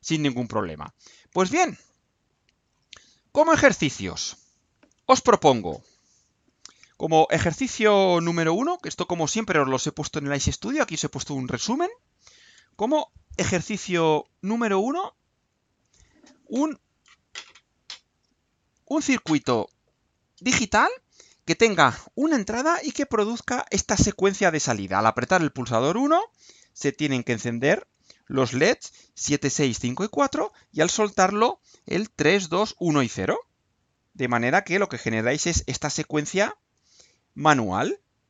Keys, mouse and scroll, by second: 0.2 click, 1.2-1.6 scroll down 2, 1.9-3.3 scroll down 6, 15.3 click.